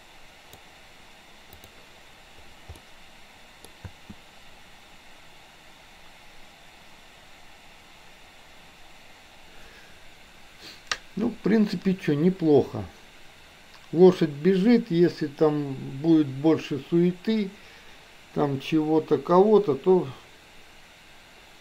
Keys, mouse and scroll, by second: 1.6 click, 2.9-3.6 middle drag, 3.9 space.